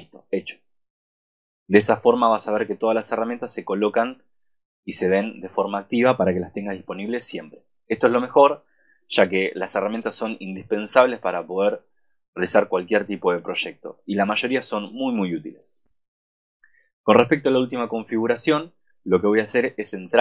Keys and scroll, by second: 7.0 super+-.